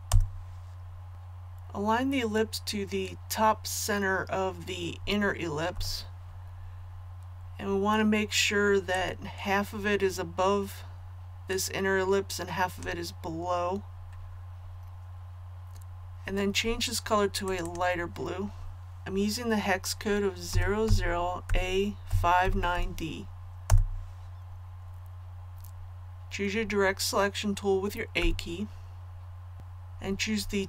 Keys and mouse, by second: 1.1 click, 5.7 v, 8.9-13.2 drag, 20.5-22.7 typing, 28.1 a.